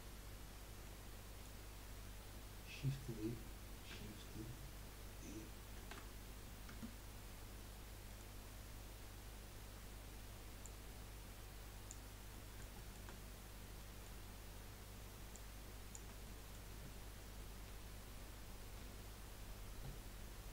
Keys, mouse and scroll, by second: 0.8-4.7 middle drag, 5.7 shift+d, 8.0 middle click, 8.8-9.4 scroll down 1, 9.4-9.8 scroll up 1, 10.6 click, 12.3-15.3 middle drag, 15.3 click, 16.2-17.4 middle drag, 17.4 KP_1, 18.7 KP_3.